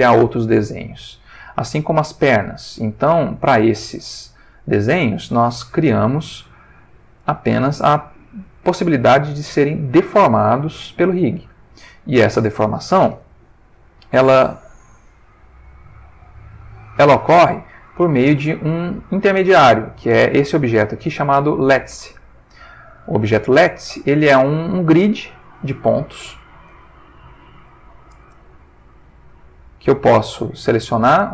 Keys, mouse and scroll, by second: 3.9 click, 5.2 click, 5.8 r, 8.8 click, 9.3 click, 10.2 click, 10.9 r, 12.5 click, 13.8 middle click, 16.9 click, 18.0 ctrl+middle click, 18.9 ctrl+click, 20.6 g, 22.1 Escape, 23.0 shift+middle click, 24.1-26.0 middle drag, 26.1 ctrl+shift+middle click, 26.8-27.9 ctrl+shift+middle drag, 28.2 ctrl+Tab, 29.1 shift+middle click, 30.1 shift+middle click, 30.8 shift+click.